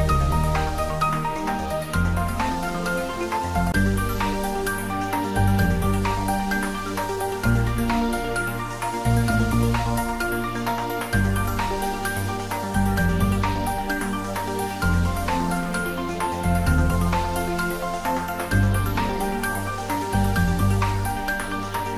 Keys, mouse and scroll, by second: 5.6 click, 18.2 click, 20.5-21.9 drag.